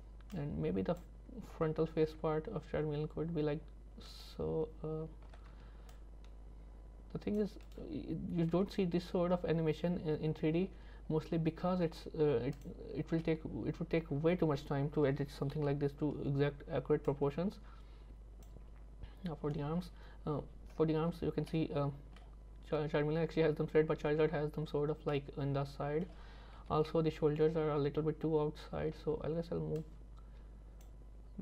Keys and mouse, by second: 0.5 click, 2.1 g, 5.3 c, 8.6 g, 13.2 middle click, 15.6 KP_1, 17.1-18.5 drag, 21.2 z, 21.5 middle click, 22.2 middle click, 25.2 middle click, 26.6 KP_3, 29.0 z, 29.9-30.9 drag.